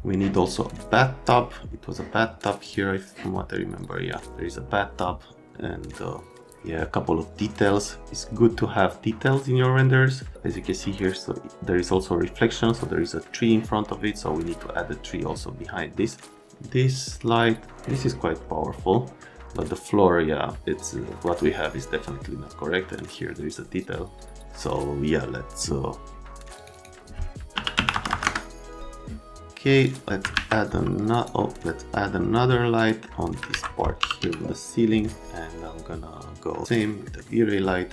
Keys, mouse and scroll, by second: 2.6 click, 8.2 right click, 18.9 middle click, 20.9 middle click, 24.3 middle click, 26.6 click, 26.7 click, 27.5 KP_5, 27.8 KP_2, 27.9 KP_0, 28.1 KP_0, 28.2 KP_Enter, 29.8 click, 30.3 alt+q, 31.1 right click, 32.7 middle click, 33.5 alt+q, 33.7-34.7 typing, 36.7 click, 37.0 middle click.